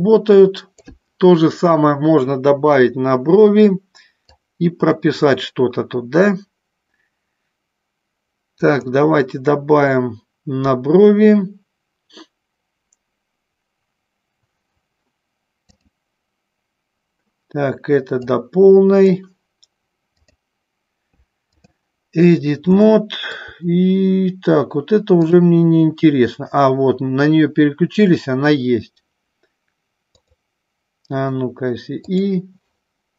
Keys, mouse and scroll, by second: 4.4 click, 8.6 click, 15.7-17.2 drag, 18.2 click, 20.4-21.8 drag, 22.8 shift+middle click, 30.2 click, 32.2 click.